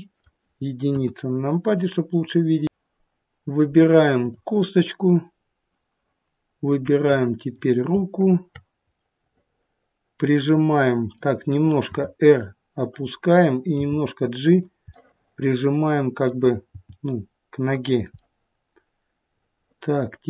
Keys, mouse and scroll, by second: 0.8 KP_1, 1.2-1.7 scroll up 1, 2.6 middle click, 4.1 click, 7.0 middle click, 8.1 shift+click, 8.9 middle click, 11.8 r, 13.7 g, 14.9 middle click, 16.6 g, 18.1 middle click.